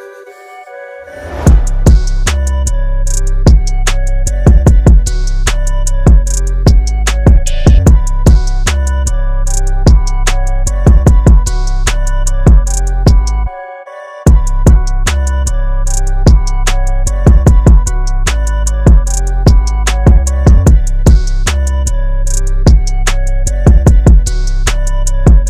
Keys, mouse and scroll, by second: 0.9 KP_5, 2.1 click, 3.0 KP_9, 3.3 KP_2, 3.9 BackSpace, 4.4 KP_5, 7.1 click, 9.9 click, 12.4 KP_5, 13.7 click, 16.4 click, 17.8 scroll up 1, 19.8 scroll up 1, 23.7-24.7 scroll up 1.